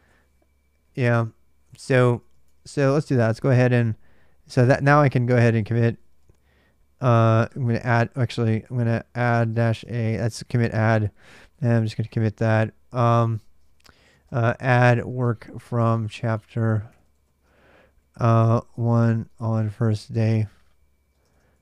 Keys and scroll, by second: 1.1-3.4 typing, 5.1-21.6 typing.